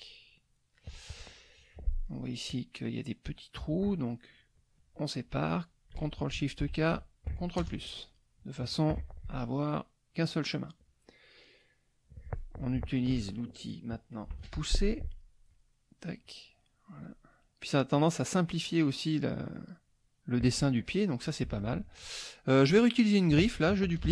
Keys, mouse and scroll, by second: 6.6 ctrl+shift+k, 7.6 ctrl+KP_Add, 9.0 F1, 13.0 shift+F2, 14.3 shift+p, 15.1 click, 15.5 click, 16.2 click, 17.0 click, 17.9 click, 19.2 click, 21.6 F1, 21.6 click, 22.5 click, 24.0 ctrl+d.